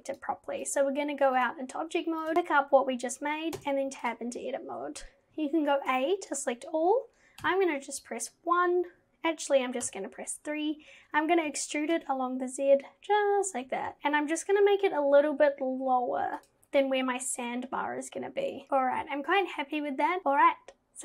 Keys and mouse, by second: 0.7 click, 1.4 click, 3.6 Tab, 5.9 a, 7.4 KP_1, 9.9 KP_3, 11.5 e, 16.5 z, 16.5 z, 16.6 z, 20.2 ctrl+z, 20.2 Tab.